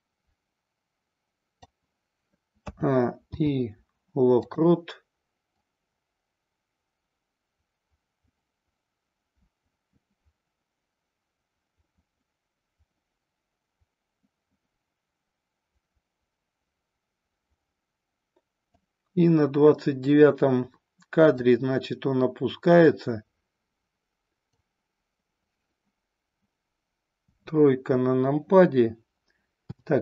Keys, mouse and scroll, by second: 2.6 a, 3.3 i, 5.5-18.8 drag, 21.2-24.5 drag, 27.1 KP_3, 29.6 KP_7.